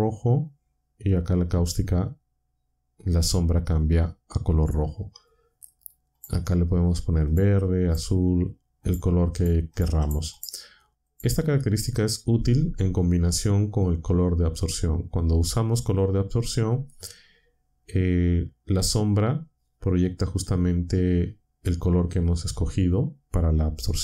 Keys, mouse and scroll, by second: 6.1 click, 7.2 click, 7.8 click, 8.8 click, 9.3 click, 9.7 click, 10.0 click, 10.3 click, 12.4-13.7 drag.